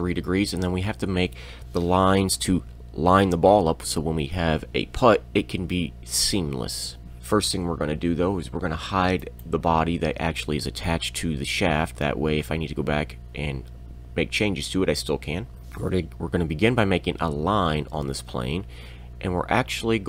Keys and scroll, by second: 15.6 Escape, 15.6 l, 17.5 l.